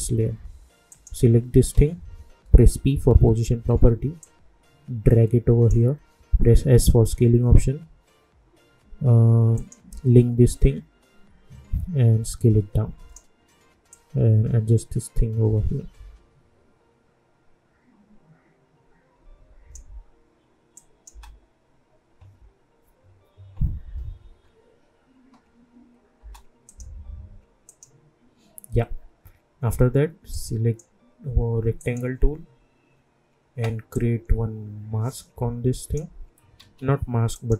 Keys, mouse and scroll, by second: 2.4 p, 4.2-6.6 drag, 6.6 s, 9.5-20.7 drag, 21.1 space, 26.2 space, 26.6 click, 30.3-36.5 drag, 36.5 ctrl+z, 37.3-37.5 drag.